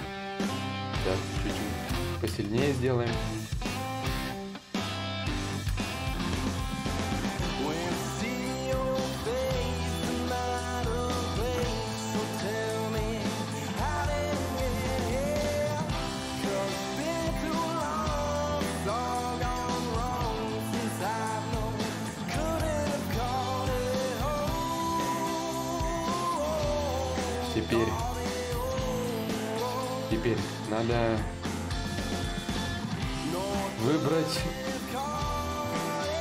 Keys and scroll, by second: 11.2 Escape, 32.2 b, 34.9 b, 35.5 d, 35.9 i.